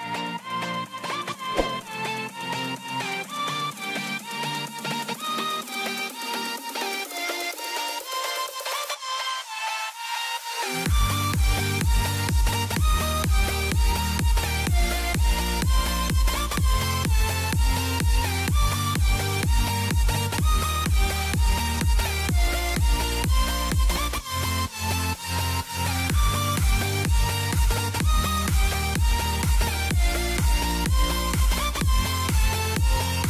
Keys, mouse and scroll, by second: 3.0 right click, 4.0 typing, 4.9 scroll down 1, 6.4 click, 11.3 right click, 13.5 click, 13.9 scroll up 1, 14.5 click, 18.7 click, 23.3 click, 25.4 scroll down 1, 25.6 middle click, 26.6 click, 29.9 click, 30.9 middle click, 32.2 click.